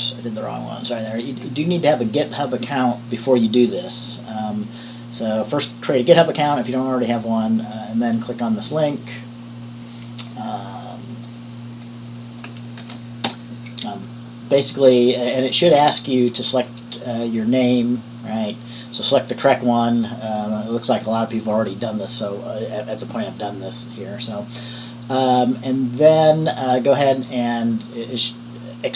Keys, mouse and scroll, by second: 2.9-10.4 drag, 13.0 ctrl+v, 13.5 Return, 20.5 click, 24.9 click, 27.5 click.